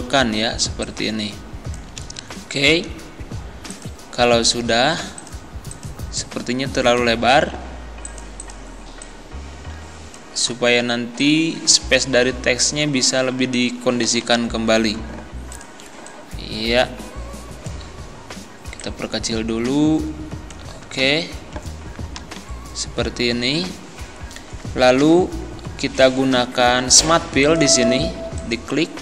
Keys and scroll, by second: 14.1 Right, 22.2 Down.